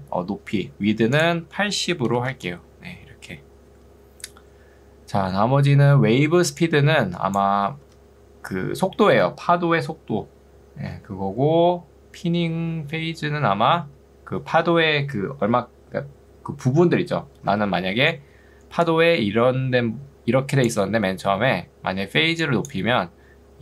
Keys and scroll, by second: 2.1 8, 2.3 Return, 6.1 ctrl+2, 7.9 Escape, 17.7 ctrl+2.